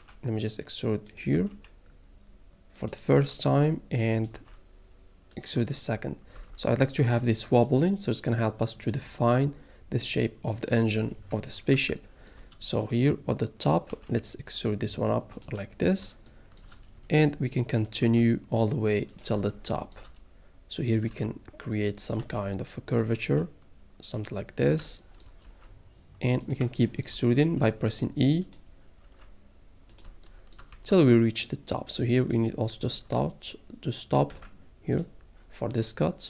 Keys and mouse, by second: 1.1 click, 1.4 e, 2.8 click, 3.1 e, 4.1 click, 4.4 e, 5.3 click, 6.4 a, 11.9 shift+middle click, 12.8 click, 13.9 e, 15.3 click, 15.9 middle click, 16.3 shift+middle click, 17.9 click, 18.0 e, 19.1 click, 19.5 shift+middle click, 21.1 e, 22.1 click, 22.2 e, 23.0 click, 23.2 e, 24.1 click, 24.8 shift+middle click, 25.4 e, 26.4 click, 26.6 shift+middle click, 27.4 e, 28.4 click, 29.0 e, 29.9 click, 30.1 shift+middle click, 30.7 e, 32.2 click, 32.2-33.8 middle drag, 34.3 g, 34.9 middle click, 35.5 middle click.